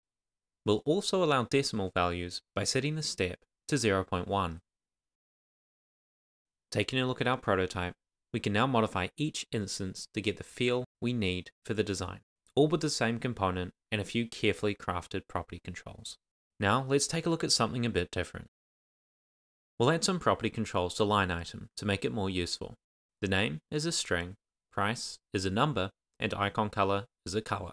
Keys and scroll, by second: 2.5 Return, 3.0 shift+;, 3.3 Return, 3.9 Tab, 4.2 shift+;, 5.4 Return, 6.1 shift+;, 7.1 super+s, 13.2 Return, 14.1 Return, 21.6 Left, 21.9 Tab, 22.0-27.7 typing, 22.3 Down, 22.5 Tab, 24.8 Return, 25.3 Return, 25.6 Tab, 25.9 Tab, 26.2 Down.